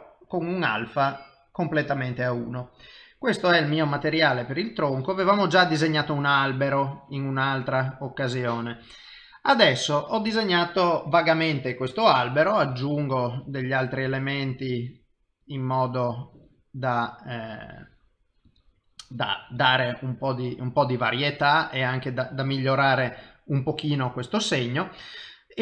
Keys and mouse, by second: 4.2 click, 12.7 click, 13.4 click, 14.7 click, 16.8 click, 17.4 click, 18.5 click, 19.0 click, 20.5 click, 21.4 click.